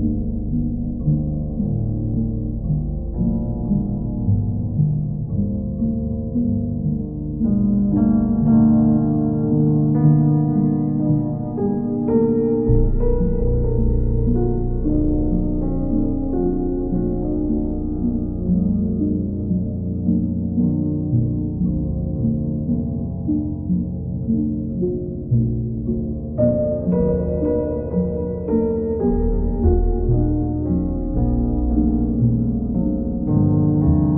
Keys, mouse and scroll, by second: 0.4 click, 1.3 alt+click, 2.7 click, 3.3 click, 3.6 shift+click, 4.2 alt+click, 6.0 click, 7.0 click, 7.4 shift+click, 8.3 alt+click, 11.2 click, 12.5 shift+click, 13.6 click, 15.8 click, 16.1 shift+click, 16.7 alt+click, 17.5 alt+click, 18.0 shift+click, 18.7 alt+click, 20.1 alt+click, 21.3 click, 23.8 click, 26.6 click, 31.4 click.